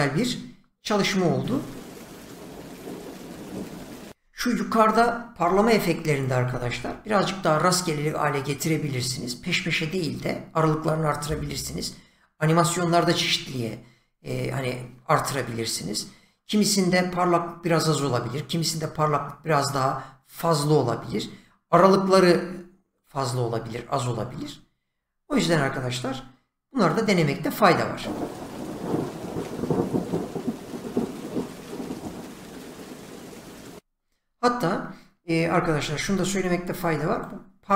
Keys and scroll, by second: 1.4 space, 5.4 <, 25.5 Escape, 27.9 space, 33.8 space, 35.5 <.